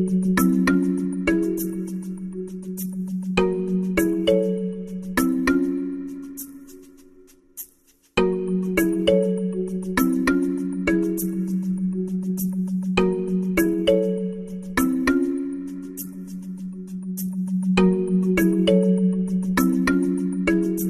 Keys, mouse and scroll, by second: 4.3-5.9 drag, 7.7 z.